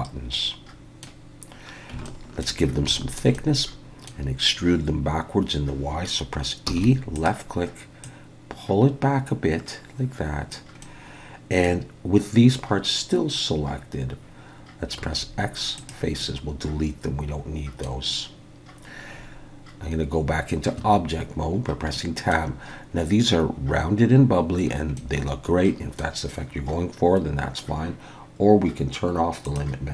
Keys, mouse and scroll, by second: 2.0 shift+middle click, 2.7 scroll up 1, 2.9 shift+middle click, 3.3 middle click, 6.7 e, 8.0 click, 10.8 middle click, 15.0 x, 16.2 middle click, 20.8 Tab, 21.5-21.9 scroll down 1, 21.9 middle click, 24.6-24.9 scroll down 1, 25.5 middle click, 29.4 click.